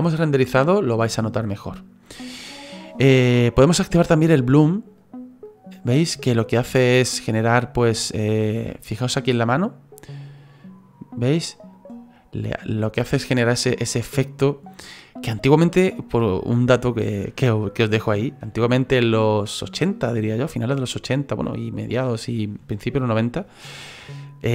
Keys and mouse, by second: 5.0 click, 5.4 click, 5.8 click, 7.1 middle click, 10.2 click, 11.7 click, 12.4 click, 12.7 click, 13.5 middle click, 14.4 middle click.